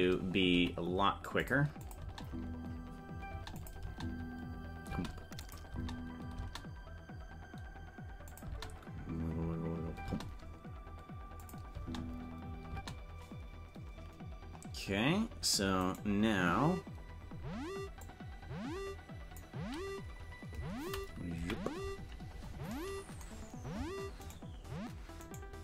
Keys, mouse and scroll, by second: 0.5 right click, 0.5 a, 0.5 g, 1.9 click, 2.1 space, 3.6 click, 3.6 space, 3.8 space, 5.0 space, 5.5 click, 5.7 space, 8.3 click, 8.5 space, 11.5 click, 11.7 space, 16.1 right click, 18.1 click, 21.3 KP_Decimal, 22.0-22.4 scroll down 10, 24.5 shift+right click.